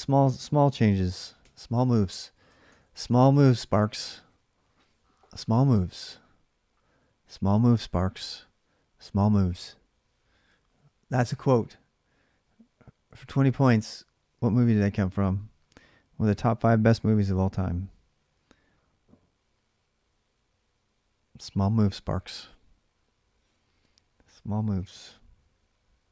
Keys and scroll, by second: 0.0-1.2 typing, 0.2 ctrl+a, 2.3 ctrl+[, 2.4 k, 3.8 Return.